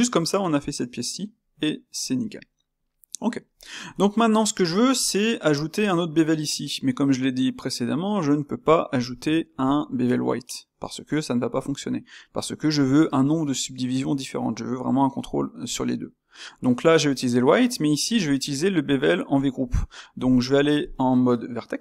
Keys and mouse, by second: 3.5-4.3 ctrl+middle drag, 4.3 Tab, 5.0 click, 18.6 shift+click, 18.9 middle click, 19.8 shift+click, 20.2 shift+click.